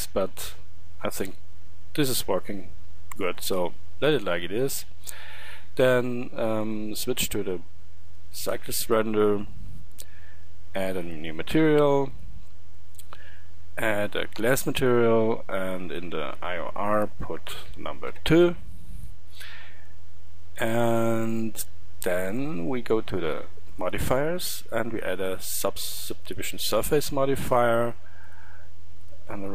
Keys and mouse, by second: 6.9-11.0 middle drag, 11.0-16.4 drag.